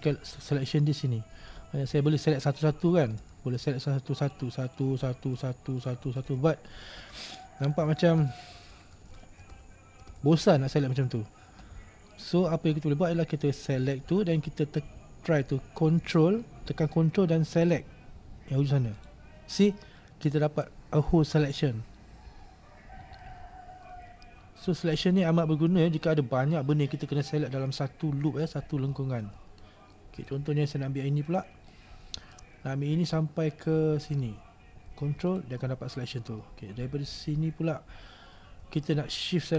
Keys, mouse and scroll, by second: 0.0 right click, 2.2 right click, 2.6 right click, 4.4 shift+right click, 4.8 shift+right click, 5.5 shift+right click, 5.9 shift+right click, 6.3 shift+right click, 8.0 ctrl+z, 8.4 ctrl+z, 8.8 ctrl+z, 9.2 ctrl+z, 9.7 ctrl+z, 10.2 ctrl+z, 11.2 ctrl+z, 12.3-19.1 middle drag, 19.1 ctrl+right click, 23.3-26.4 middle drag, 29.1-31.3 shift+middle drag, 31.3 right click, 31.8-35.4 middle drag, 35.4 ctrl+right click.